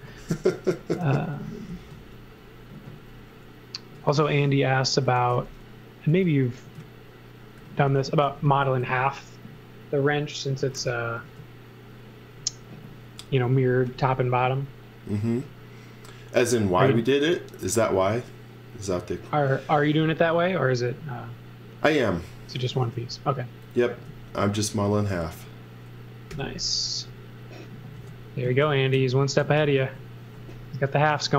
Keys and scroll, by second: 0.0-3.1 typing, 4.1-8.2 typing, 10.5 x, 11.2 space, 13.5 x, 14.0 v, 17.8 space, 22.8 m, 23.9 space, 26.3 b, 27.9 space, 28.9 super+z, 29.6 super+z, 31.1 z.